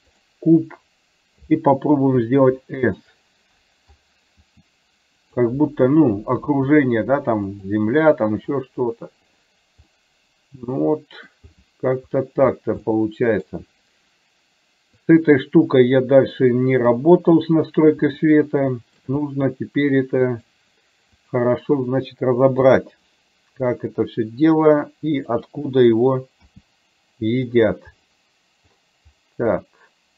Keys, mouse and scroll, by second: 2.3 s, 4.4 s, 6.5 s, 10.0-11.4 middle drag, 13.0 middle click, 15.0 click, 18.3 shift+middle click, 19.3-20.5 middle drag, 21.3 click, 22.7 r, 26.7 g, 29.7-30.1 middle drag.